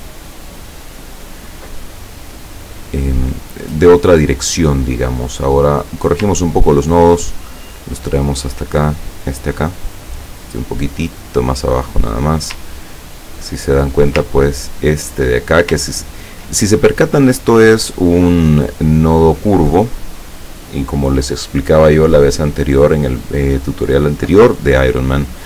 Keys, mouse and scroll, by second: 5.8 click, 6.4-7.1 ctrl+scroll up 2, 7.1-7.9 ctrl+scroll up 1, 7.9-9.7 drag, 9.7-10.2 scroll up 2, 10.2-12.0 drag, 12.8-13.8 ctrl+drag, 14.3-15.4 ctrl+drag, 16.1 ctrl+scroll down 1, 19.9 click.